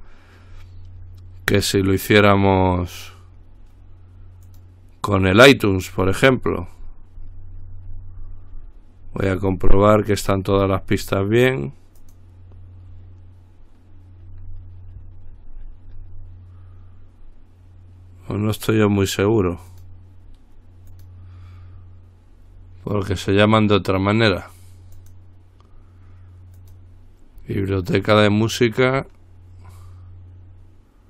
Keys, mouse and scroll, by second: 0.1-1.2 scroll up 2, 1.2-2.7 scroll up 1, 4.7 click, 6.7-9.4 scroll down 1, 10.8-11.3 scroll down 1, 12.2 click, 14.3-15.1 scroll down 1, 15.1-15.8 scroll up 1, 15.8-17.1 scroll up 1, 18.8 click, 19.9 click, 21.1 click, 25.2 click, 26.8 click.